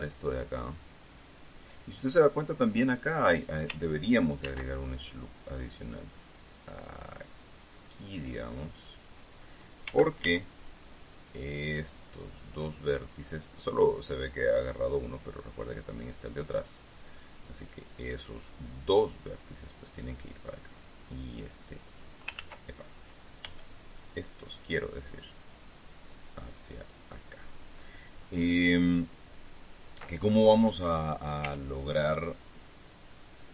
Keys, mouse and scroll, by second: 0.9-2.4 drag, 5.0 ctrl+r, 6.3 click, 9.5 click, 10.4 a, 11.6 click, 12.5 middle click, 13.5-16.4 drag, 21.3-22.7 drag, 22.9 ctrl+z, 24.0 b, 24.5 click, 25.2 middle click, 32.0 a.